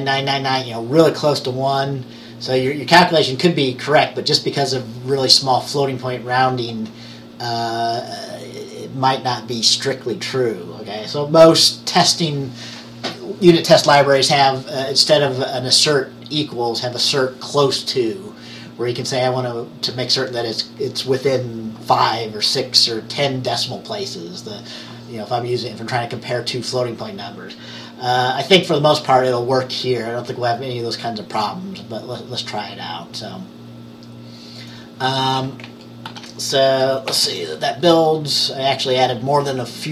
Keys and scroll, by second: 36.1 ctrl+s, 37.2 ctrl+b.